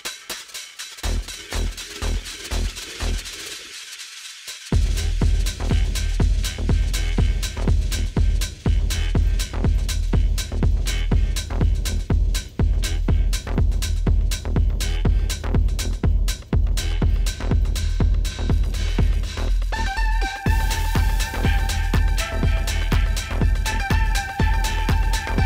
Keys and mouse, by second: 4.2 click, 8.9 click, 14.1 click, 22.4 click.